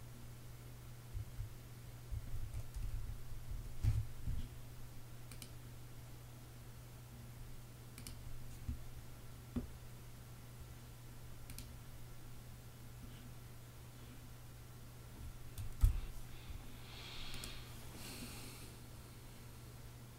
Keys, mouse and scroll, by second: 0.0-2.2 typing, 3.2 Escape, 15.2 super+p.